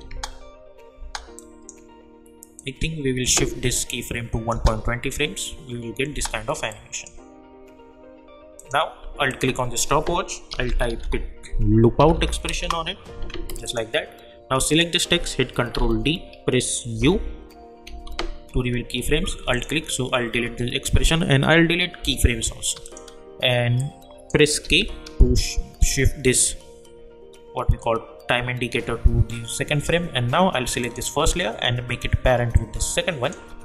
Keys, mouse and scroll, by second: 0.1 space, 1.4-4.5 drag, 4.5 space, 6.7-8.0 drag, 8.6 click, 9.3 alt+click, 10.3-11.5 typing, 12.0 Down, 12.6 Return, 13.6 click, 15.7 ctrl+d, 17.0-18.3 typing, 19.5 alt+click, 22.8 click, 24.6 k, 30.8-33.6 drag.